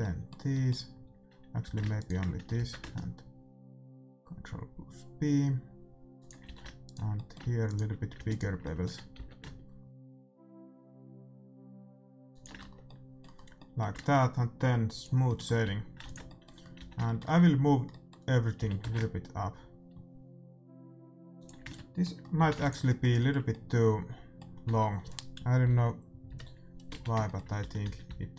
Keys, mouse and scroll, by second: 0.0-4.3 middle drag, 1.6 a, 1.9-3.7 right drag, 2.5 ctrl+b, 6.4 a, 6.8-10.2 right drag, 7.1-8.6 middle drag, 9.1 ctrl+b, 10.2 middle click, 12.5 Tab, 12.6 middle click, 12.8-18.5 middle drag, 14.9-16.9 drag, 15.6 a, 16.0 ctrl+s, 16.7 a, 18.5 g, 22.4 a, 22.5 ctrl+s, 24.6 Tab, 25.7-28.3 typing.